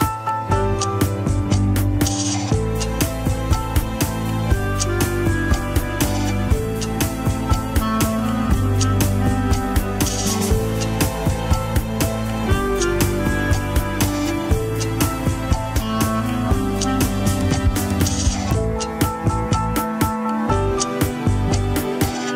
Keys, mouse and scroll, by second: 1.0 click, 1.4-2.0 scroll up 3, 2.0 click, 2.4 ctrl+Tab, 2.5 middle drag, 2.8 alt+z, 3.1 shift+middle click, 4.1 Tab, 4.3 alt+z, 4.4 scroll up 1, 4.6 middle click, 5.3 click, 5.6 shift+click, 6.1 shift+click, 6.9 KP_1, 7.1 scroll down 2, 7.3 shift+middle click, 7.8-8.3 scroll up 5, 8.2 shift+middle click, 8.9 shift+click, 9.3 shift+click, 9.6 shift+click, 10.1 shift+click, 10.8 KP_1, 10.9 scroll down 3, 11.1 ctrl+Tab, 11.7-13.1 shift+middle drag, 13.1 Tab, 15.6 Tab, 16.2 alt+h, 16.5-17.0 middle drag, 17.0 click, 17.4 shift+click, 17.9 shift+click, 18.2 shift+click, 18.5 shift+drag, 19.0-19.3 shift+middle drag, 19.3 scroll up 2, 19.5-20.0 middle drag, 20.0 shift+click, 20.3 shift+click, 20.6 shift+click, 20.9 shift+click, 21.2 shift+click.